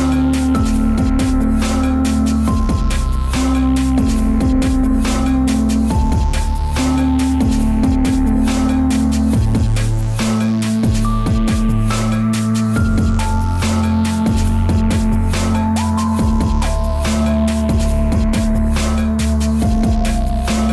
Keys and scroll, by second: 0.4 space, 1.3 ctrl+z, 2.7 ctrl+z, 4.8 ctrl+z, 12.5 ctrl+z, 15.6 Delete.